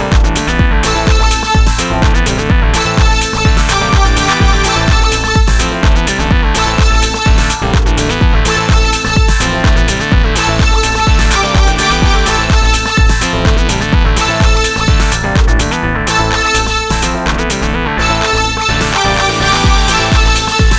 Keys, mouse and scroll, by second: 0.9 shift+KP_Divide, 3.9 a, 5.9-10.5 right drag, 6.8 s, 10.0 s, 10.6 right click, 12.5 s, 16.7 s, 20.2-20.7 drag.